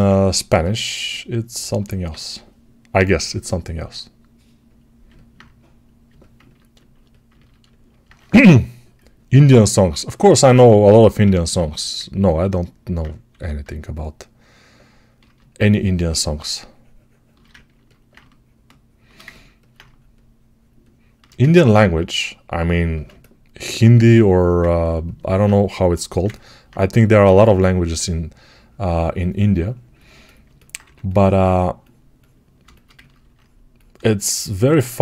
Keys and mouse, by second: 1.5-7.6 alt+drag, 7.6-24.5 alt+shift+right drag, 24.5-32.5 ctrl+alt+drag.